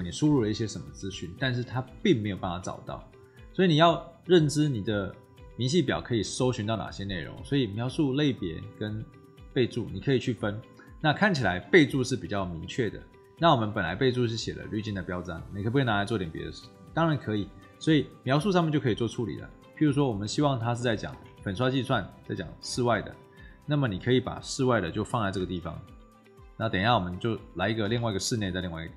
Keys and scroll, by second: 21.0 ctrl+c, 22.6 ctrl+v, 24.5 shift+9, 25.3 shift+0, 27.7 ctrl+c.